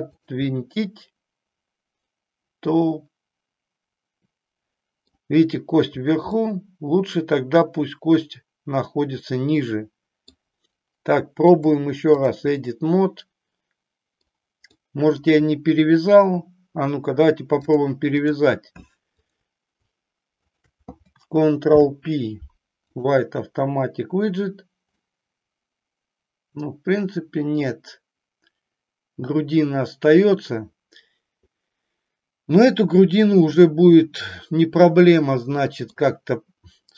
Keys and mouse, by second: 0.3 click, 0.6-5.1 middle drag, 6.5-10.4 middle drag, 11.5 click, 12.6-14.4 middle drag, 14.6 middle click, 17.6 click, 20.4 shift+click, 25.0-35.9 middle drag.